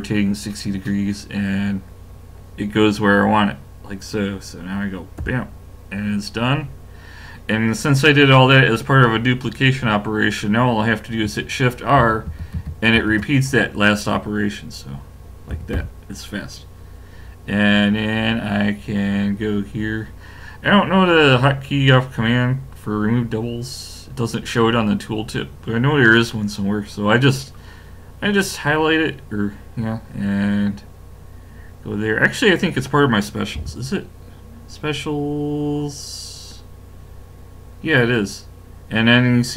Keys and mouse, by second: 12.0 shift+r, 12.3 shift+r, 12.6 shift+r, 13.0 shift+r, 15.5 a, 15.7 a, 33.6 w.